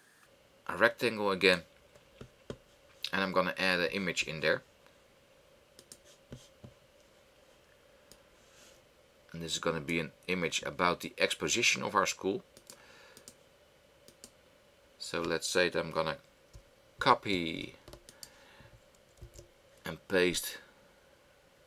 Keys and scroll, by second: 17.0 super+c, 19.4 super+v.